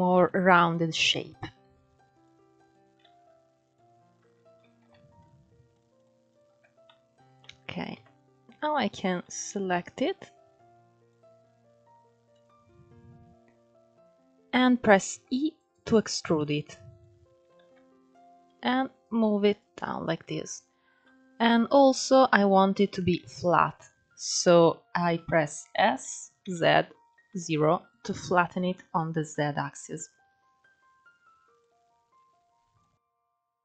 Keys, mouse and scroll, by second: 0.0 shift+v, 1.0 click, 1.3 shift+v, 2.3 click, 2.7 shift+v, 4.3 ctrl+3, 4.9 click, 5.6 shift+click, 6.0 shift+click, 6.4 scroll down 1, 6.5-7.6 middle drag, 7.6 KP_1, 8.5-8.9 scroll up 3, 8.9-9.9 shift+middle drag, 9.9 click, 12.0-14.8 drag, 14.8 e, 16.1 click, 17.3 ctrl+z, 17.8 click, 19.3 click, 20.5 scroll down 4, 20.7 middle click, 21.5-22.7 scroll up 4, 22.7-23.2 scroll down 2, 23.2 middle click, 24.1 KP_1, 25.7 s, 28.0-28.3 scroll up 3, 30.3 s, 31.8 click, 32.8 r.